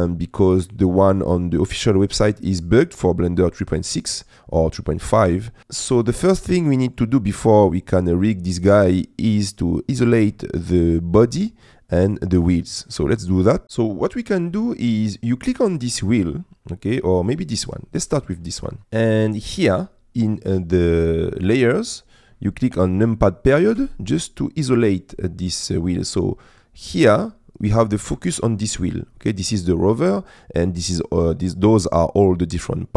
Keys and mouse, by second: 0.9 shift+middle click, 4.0 middle click, 6.6 middle click, 7.4 middle click, 9.1 middle click, 10.3 middle click, 12.1 middle click, 13.8 middle click, 14.9 middle click, 15.8 click, 16.8 middle click, 18.3 middle click, 23.8 KP_Decimal.